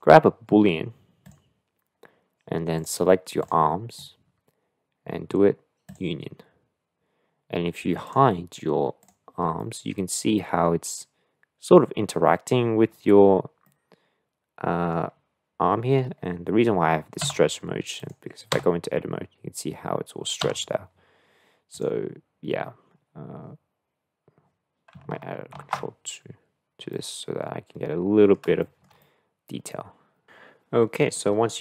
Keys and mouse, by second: 2.7 click, 5.9-8.1 drag, 9.0 click, 9.6-12.5 middle drag, 13.6-14.9 middle drag, 17.2 Tab, 18.5 Tab, 20.5 Tab, 26.1 ctrl+2, 26.9-28.3 middle drag, 28.7 shift+middle click, 29.1-30.2 middle drag, 31.2 middle click.